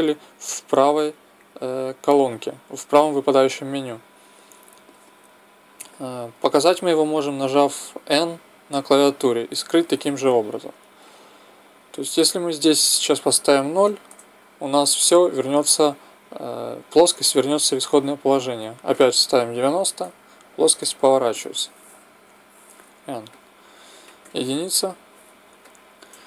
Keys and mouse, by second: 7.5 n, 8.7 n, 12.5-14.4 drag, 18.6-20.5 drag, 22.3 n, 23.4 click, 24.2 KP_1.